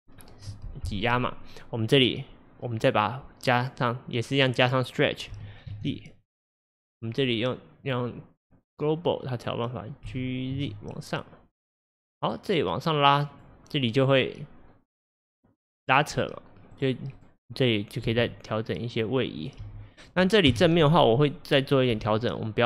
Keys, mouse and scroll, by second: 5.4 g, 6.8-7.9 right drag, 7.9-10.1 drag, 10.1 g, 16.1 drag, 16.8 drag, 17.2 click, 18.1 g, 19.4 click, 19.7 g, 20.6 KP_1, 21.2-21.8 scroll up 1, 21.8 scroll up 1, 22.0 g.